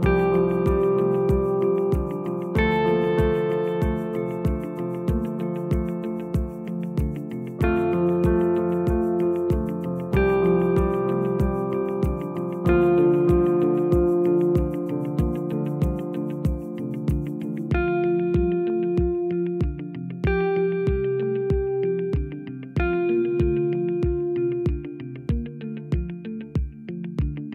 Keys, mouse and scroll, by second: 0.0 click, 3.5 s, 4.6-7.1 scroll down 1, 7.1 g, 8.9-10.3 scroll down 1, 10.3 Tab, 11.1 click, 11.6-12.5 scroll down 4, 12.5-13.3 scroll down 1, 13.3 scroll down 1, 13.4 shift+a, 17.7-19.4 drag, 19.4 g, 21.8 s, 25.4 Tab, 26.6 ctrl+r.